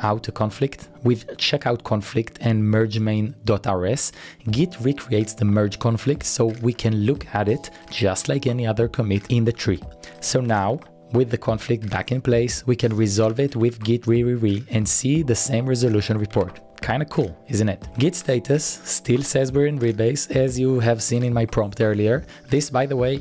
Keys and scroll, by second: 0.0-0.2 typing, 6.2 Up, 6.3 Return, 9.1-12.6 typing, 16.1-18.7 typing, 17.5 Return, 22.6-23.2 typing.